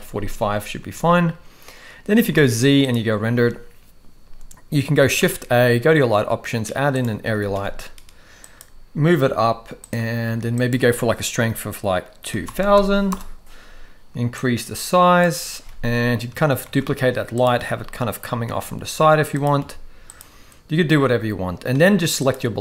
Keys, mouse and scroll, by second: 0.9 ctrl+s, 2.3 z, 5.1 shift+a, 7.2 g, 10.6-13.1 drag, 12.6 0, 12.8 0, 14.4 click, 16.6 shift+d, 17.7 t, 18.5 r, 19.6 g, 22.2 click.